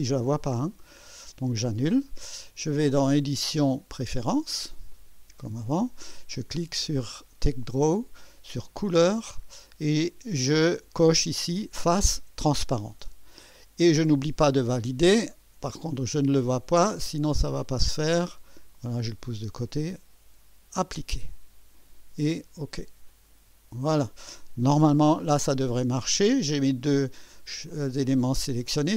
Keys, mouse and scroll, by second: 1.7 click, 3.5 click, 4.9 click, 6.6 scroll down 2, 7.5 click, 9.0 click, 11.6 click, 16.6-18.9 drag, 20.8 click, 23.1 click.